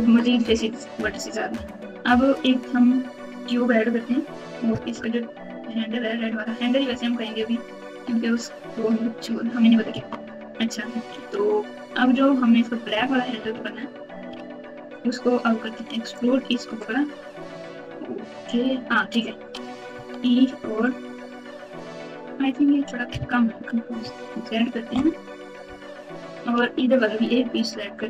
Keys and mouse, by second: 4.9 KP_7, 7.3 ctrl+KP_8, 7.9 ctrl+KP_8, 9.9 Tab, 13.4 3, 14.3 alt+z, 15.1-16.1 drag, 19.9 e, 24.0 ctrl+z, 24.9 KP_Subtract.